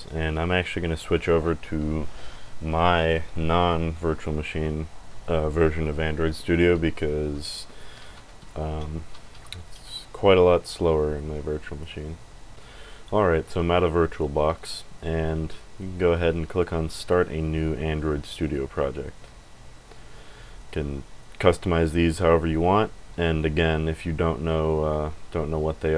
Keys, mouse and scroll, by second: 18.4 click, 20.5 click, 21.2 click, 22.1 click, 23.2 click.